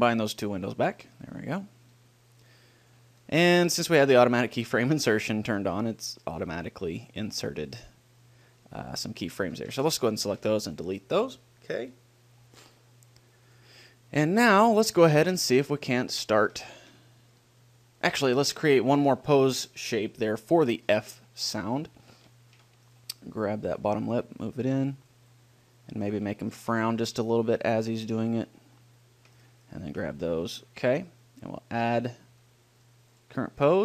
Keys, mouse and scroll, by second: 0.5 click, 0.9-3.4 drag, 3.4 middle click, 5.5-7.2 middle drag, 8.8-11.0 middle drag, 9.7 a, 10.0 a, 10.6 Delete, 13.7-15.3 drag, 15.3-17.6 middle drag, 18.1 middle click, 22.2 middle click, 23.2-24.8 right drag, 24.8-26.0 drag, 26.0 middle click, 26.4 right click, 27.1 g, 28.6 click, 30.1 click, 30.1-31.6 right drag, 33.4-33.8 drag.